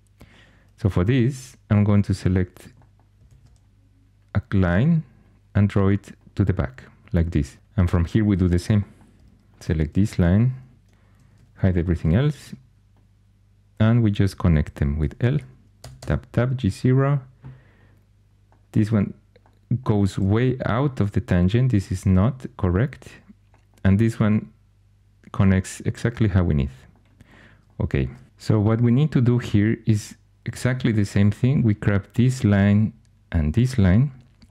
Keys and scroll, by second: 1.0 2, 3.2 shift+a, 8.3 2, 11.2 shift+h, 12.4 1, 15.7 Tab, 15.9 Tab.